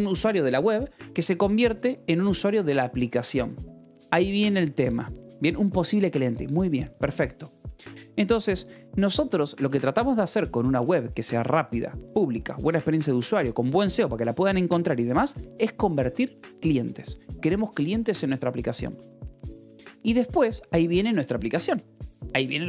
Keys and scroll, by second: 8.6 Escape, 9.9 k, 11.1 shift+v, 15.7 Escape, 18.5-21.8 typing, 22.2 Return.